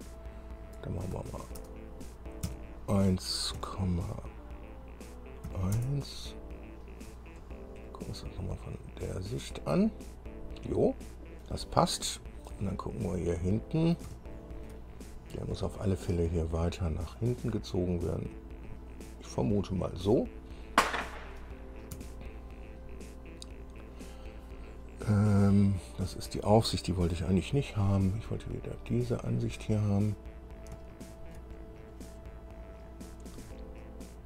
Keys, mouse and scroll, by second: 1.2 BackSpace, 1.8 BackSpace, 2.6 KP_1, 3.7 KP_Decimal, 5.6 KP_1, 6.1 KP_Enter, 7.5 scroll down 2, 8.0-11.7 drag, 12.0 scroll down 2, 12.7-14.3 drag, 15.3-15.7 shift+scroll up 3, 17.3-20.3 drag, 20.9 scroll down 2, 22.1 KP_1, 29.1 click, 30.3-30.7 scroll down 1, 31.1 shift+click, 32.0-32.7 scroll up 2, 33.0 scroll up 1, 33.5 scroll up 1.